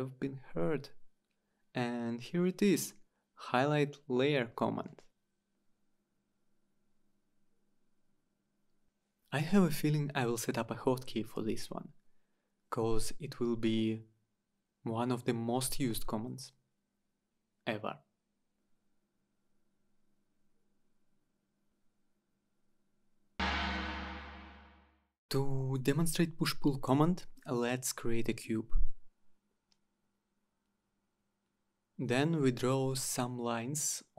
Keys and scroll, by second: 3.5 Return, 16.9 Return.